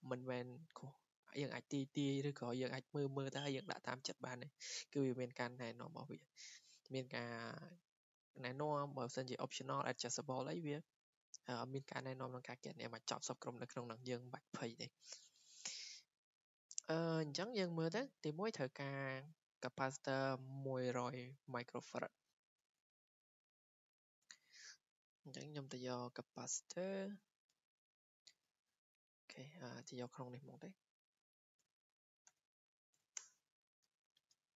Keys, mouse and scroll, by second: 22.3 click, 24.4 click, 26.6 click, 29.2 click, 29.6 click, 31.0 click, 31.4-33.0 typing, 33.2 Return.